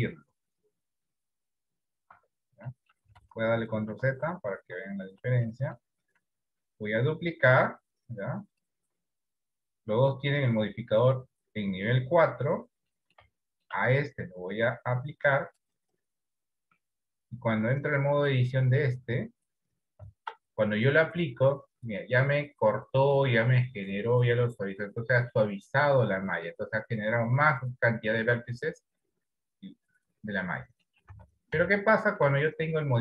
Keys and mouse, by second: 2.4 Tab, 2.9 middle click, 3.4 ctrl+z, 4.0 ctrl+z, 4.3 ctrl+z, 4.7 ctrl+z, 5.9 middle click, 6.9 shift+d, 13.1 middle click, 13.6 shift+middle click, 15.8 click, 19.3 Tab, 22.2-31.1 middle drag, 31.4 Tab, 32.0 shift+middle click.